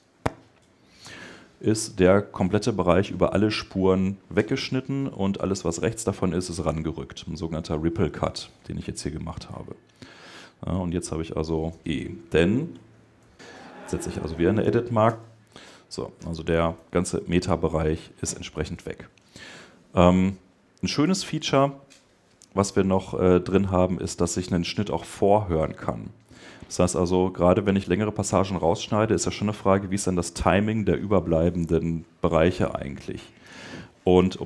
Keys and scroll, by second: 20.9 Escape.